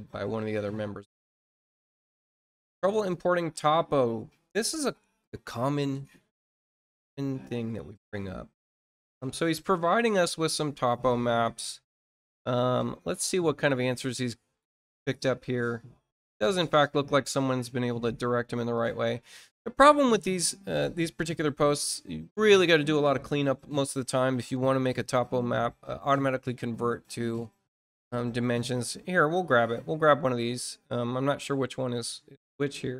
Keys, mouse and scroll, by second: 0.3-0.8 scroll down 1, 1.2 scroll down 1, 2.8 click, 7.0-7.5 scroll down 1, 12.3-12.8 scroll down 1, 13.4-13.7 scroll down 2, 13.9-17.3 scroll down 12, 18.7-19.0 scroll up 1, 19.2 middle click.